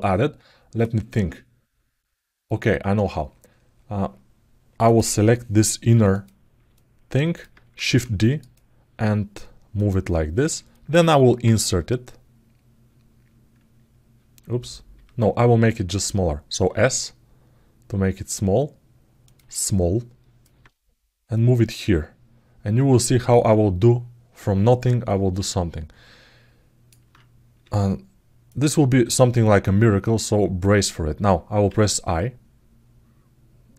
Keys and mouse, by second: 4.6 click, 5.9 click, 6.5 alt+middle click, 9.5 click, 10.5 alt+middle click, 19.3 alt+middle click, 21.1-23.1 drag, 23.2-26.7 alt+middle drag.